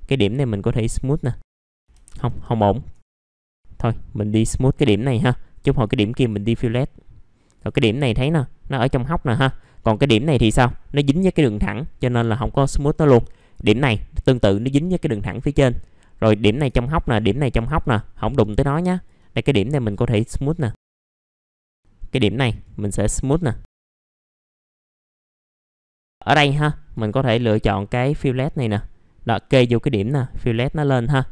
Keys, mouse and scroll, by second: 0.3 click, 3.5 right click, 4.3 click, 6.5 middle click, 7.4 click, 8.8 middle click, 9.0-9.4 scroll down 1, 9.4 click, 9.7 middle click, 9.8-10.4 scroll down 1, 10.4 middle click, 12.7-13.3 scroll up 1, 13.3-14.5 drag, 15.4 middle click, 16.3 click, 16.9 ctrl+click, 17.8 click, 19.1 right click, 20.5 click, 21.4 middle click, 21.6 click, 21.8 middle click, 23.2 click, 23.6 middle click, 24.1 click, 24.2 middle click, 24.3 scroll down 1, 24.5 scroll up 1, 24.7 right click, 25.1 click, 25.4 scroll down 1, 25.6 click, 25.7 scroll up 1, 25.9 click, 28.4-29.3 scroll up 1, 29.3 click, 30.7 middle click.